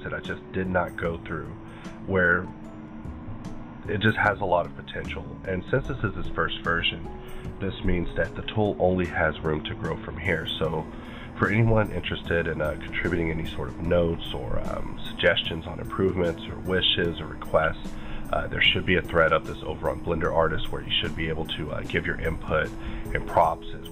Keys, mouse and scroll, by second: 3.1 scroll down 3, 3.9-6.6 scroll down 7.